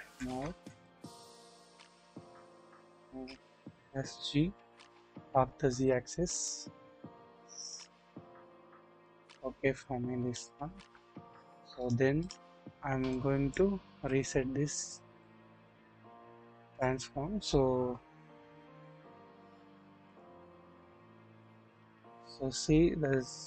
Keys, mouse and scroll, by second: 0.5 alt+z, 1.0 click, 1.3 scroll down 1, 1.8-2.2 shift+middle drag, 3.0-3.7 typing, 4.9 typing, 9.0-10.3 drag, 10.7-11.2 scroll up 1, 11.8-12.3 drag, 13.1 click, 13.8 alt+z, 15.2-16.8 drag, 20.0 click.